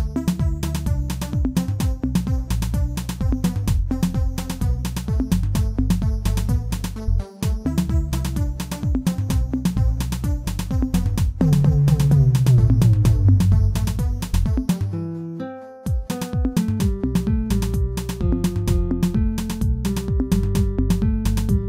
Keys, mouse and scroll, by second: 0.0 x, 2.2 alt+click, 3.8 ctrl+l, 4.4 x, 6.2 alt+click, 6.6-6.9 scroll down 2, 6.9-8.9 middle drag, 8.9 alt+click, 10.0 KP_1, 12.3 scroll up 2, 13.1 s.